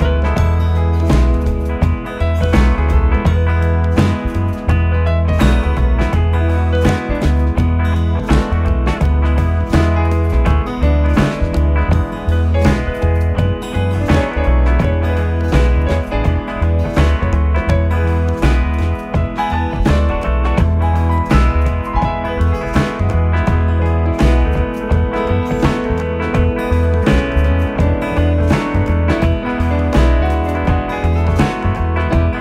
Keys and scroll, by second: 24.3 i, 26.9 v.